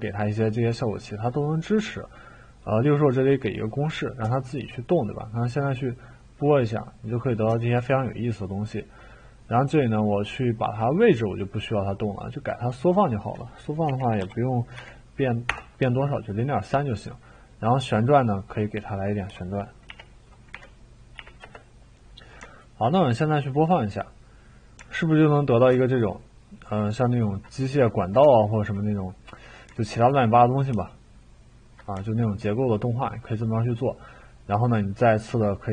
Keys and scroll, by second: 13.9-14.7 typing, 15.5 Return, 19.0-21.2 typing, 21.4 Return.